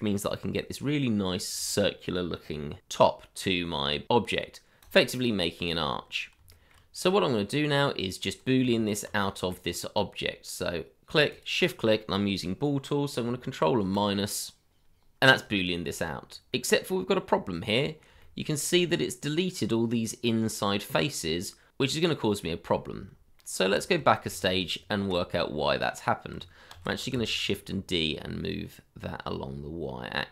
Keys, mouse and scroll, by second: 5.7 middle click, 6.5 shift+middle click, 7.0-7.4 scroll down 1, 7.6 middle click, 8.6 Tab, 9.4 middle click, 9.7-11.1 scroll up 1, 11.3 shift+click, 13.8 ctrl+-, 15.6 shift+middle click, 15.9 scroll up 1, 17.7 middle click, 17.8 shift+middle click, 18.0-18.4 scroll up 1, 18.6 middle click, 22.8-23.2 scroll down 1, 23.4 shift+middle click, 24.2 ctrl+z, 25.4 middle click, 27.1 y.